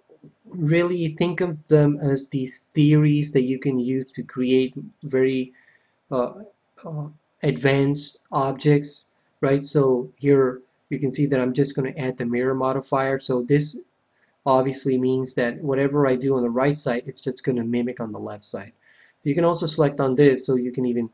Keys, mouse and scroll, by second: 19.6-21.1 drag.